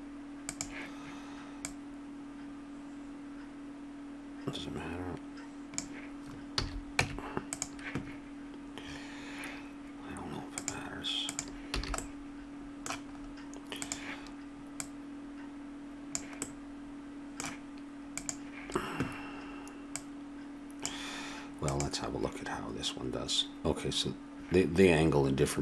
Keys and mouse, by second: 1.6-4.1 drag, 6.5 a, 7.0 Tab, 11.8 a, 12.0-13.1 drag, 13.8-16.7 drag, 18.2-21.8 drag, 25.4 typing.